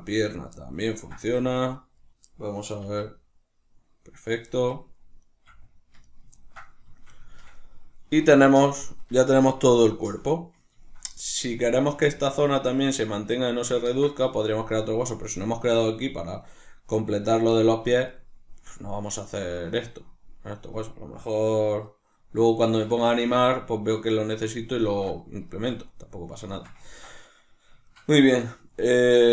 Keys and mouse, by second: 0.3 right click, 0.8 ctrl+middle click, 1.1 g, 1.9 right click, 2.7-4.2 middle drag, 2.7 r, 4.2 right click, 5.1 right click, 5.3 r, 6.1 right click, 6.3-29.3 ctrl+middle drag.